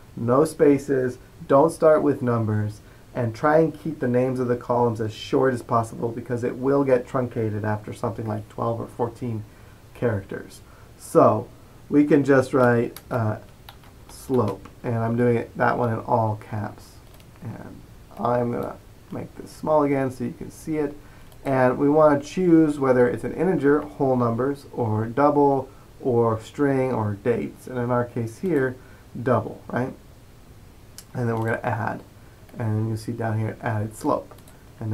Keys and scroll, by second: 12.5 typing, 14.1-14.9 typing, 17.2-17.9 typing.